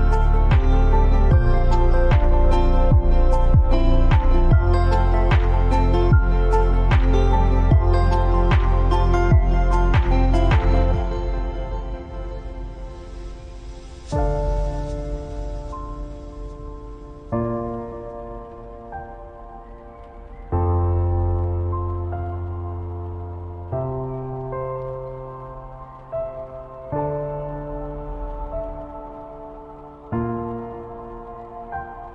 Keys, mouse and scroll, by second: 4.3 Down, 5.7 Up, 7.6 click, 15.1 click, 19.1-22.8 drag, 24.7 right click, 25.9 click, 31.8 scroll up 1.